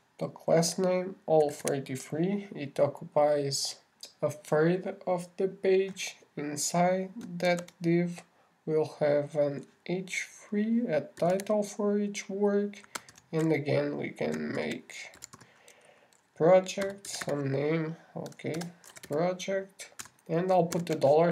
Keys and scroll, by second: 8.9 shift+<, 14.5 alt+shift+8, 16.0 shift+p, 16.6 shift+r.